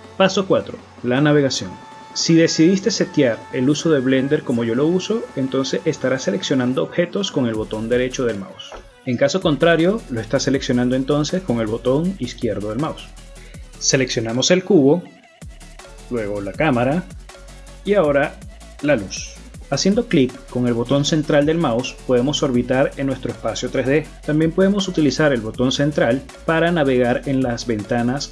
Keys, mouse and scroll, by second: 9.0 shift+right click, 10.2 shift+right click, 10.7 shift+middle click, 11.3 shift+middle click, 11.9 middle click, 12.6 right click, 13.4 right click, 13.9 middle click, 17.2 right click, 19.6 right click, 22.6 middle click, 27.5-28.1 scroll up 8.